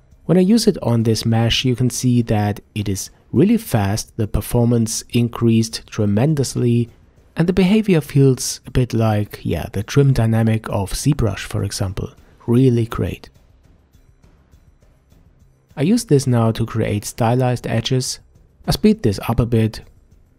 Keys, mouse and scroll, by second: 2.0 f, 3.8-8.8 drag, 8.8-9.8 middle drag, 9.8 click, 10.5-11.4 middle drag, 11.4-12.5 drag, 12.5 middle click, 12.9 click, 13.8 middle click, 14.2-15.7 drag, 15.7 middle click, 16.1 click, 16.9 middle click, 17.3 click, 18.1 middle click, 18.7-19.7 drag, 19.9 middle click, 20.2-20.3 drag.